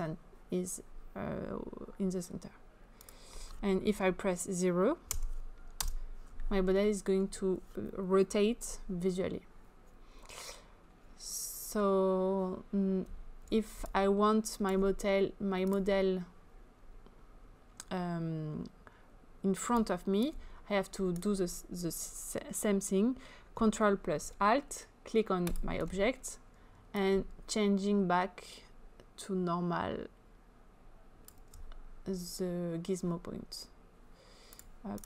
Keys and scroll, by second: 5.1 0, 5.7 Return.